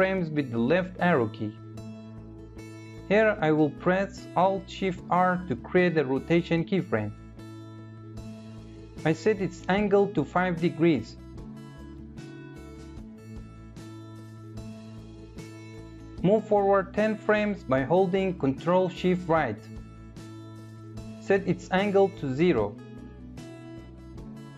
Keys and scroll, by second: 3.1 alt+shift+f, 17.8 ctrl+shift+-.